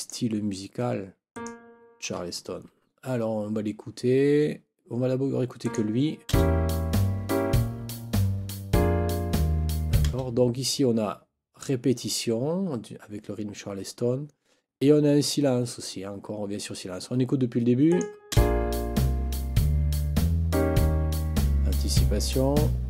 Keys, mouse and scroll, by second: 0.0 click, 1.3 click, 5.6 click, 6.3 space, 10.0 space, 17.9 click, 18.3 space.